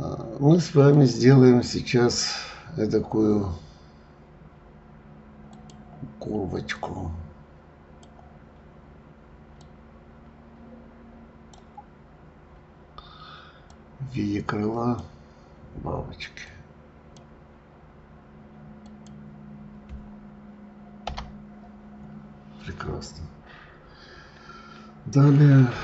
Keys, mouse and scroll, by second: 0.8-3.9 drag.